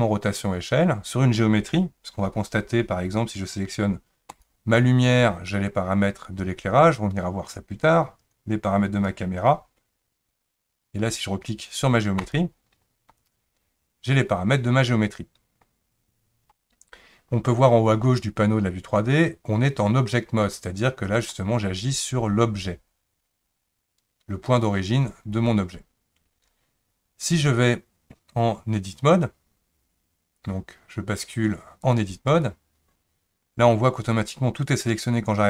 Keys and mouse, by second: 4.3 click, 8.9 click, 12.2 click, 21.2 click, 27.3-32.0 drag.